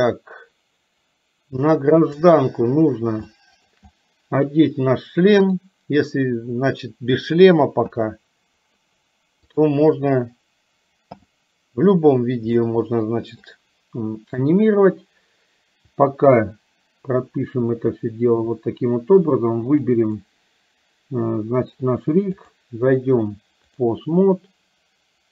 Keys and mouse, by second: 2.2 click, 3.4 shift+middle click, 5.5 click, 12.6 shift+middle click, 19.9 click, 22.5-24.2 drag.